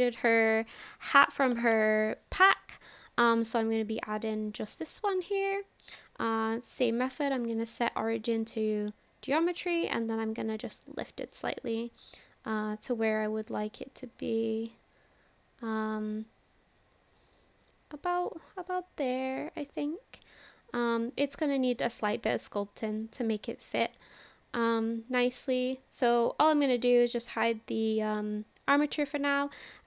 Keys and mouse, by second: 4.5 click, 6.8-8.6 drag, 9.5-11.3 drag, 11.6 click, 11.8-13.0 middle drag, 13.5-16.8 drag, 17.2-18.2 middle drag, 22.3 middle click, 24.8 click, 27.4 shift+middle click, 27.6 shift+click, 28.8 shift+click.